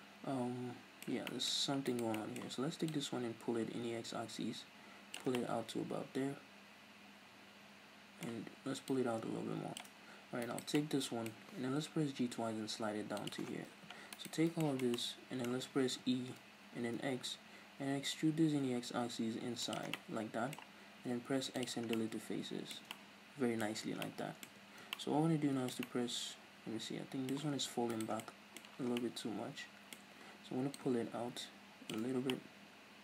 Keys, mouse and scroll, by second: 1.8 right click, 2.1 middle click, 2.9-5.3 drag, 5.3-8.8 middle drag, 8.8-10.4 drag, 10.4 right click, 10.8-13.3 middle drag, 11.4-11.9 scroll down 2, 11.9 g, 13.3 click, 13.5 scroll down 1, 14.1 alt+right click, 14.4 scroll down 1, 14.6-19.7 shift+middle drag, 16.1 e, 19.7 shift+click, 19.9-27.9 middle drag, 21.0 x, 22.7 Tab, 23.6-24.0 scroll up 2, 24.4 Tab, 24.6 scroll up 2, 27.9 right click, 28.2-30.7 middle drag, 30.7-32.3 drag, 32.3-33.0 middle drag.